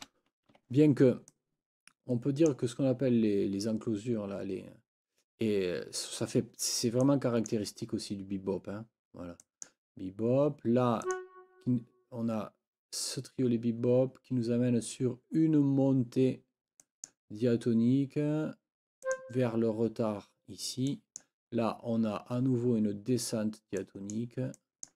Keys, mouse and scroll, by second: 0.0-0.5 typing, 0.6 Escape, 1.3-2.7 drag, 7.0 click, 9.4 click, 11.0 click, 16.8 click, 19.0 click, 20.9 click, 21.1 scroll up 1, 23.8-24.3 scroll up 1, 24.6 click, 24.6 scroll up 2, 24.8 click, 24.9 click.